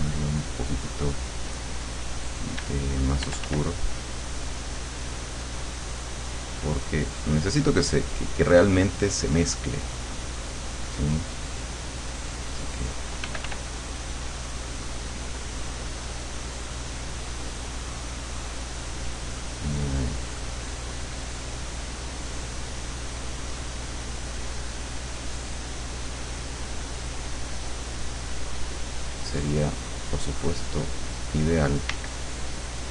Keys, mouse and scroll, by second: 0.3 click, 1.0 click, 2.6 d, 4.0 click, 4.0 f, 6.6 click, 8.0 click, 10.0 click, 11.2 click, 11.6 click, 12.5 click, 13.3 f, 13.8-20.2 drag, 21.8-22.8 drag, 23.0 click, 24.4-26.2 drag, 29.0 click, 29.7 click, 30.4 click, 31.2 click, 32.0 d, 32.6 click.